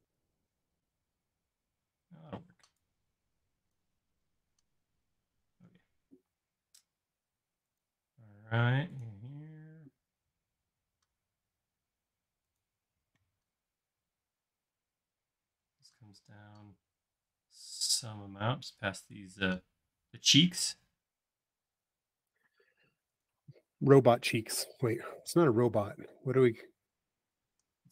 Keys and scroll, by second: 0.0 super+z, 2.4 p, 5.6 l, 25.6 p.